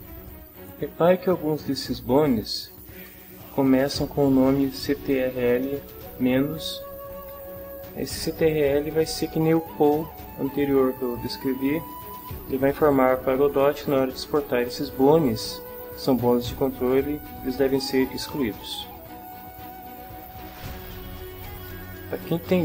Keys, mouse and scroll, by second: 0.5 right click, 1.2 shift+middle click, 2.0 ctrl+shift+middle click, 2.0-3.1 ctrl+shift+drag, 14.5-15.7 ctrl+drag, 16.6-18.5 drag, 19.0 click.